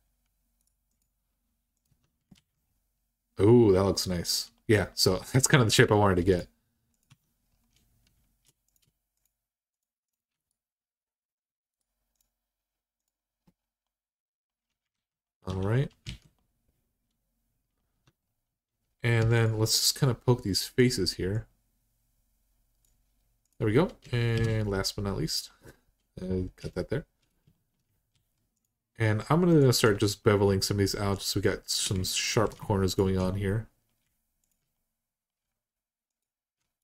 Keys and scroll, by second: 1.7 Tab, 2.1 alt+z, 6.9 Tab, 14.7 alt+z, 15.3 Tab, 15.8 alt+z, 17.7 Tab, 19.0 3, 24.1 r, 26.4 2, 27.9 alt+z, 32.1 ctrl+z.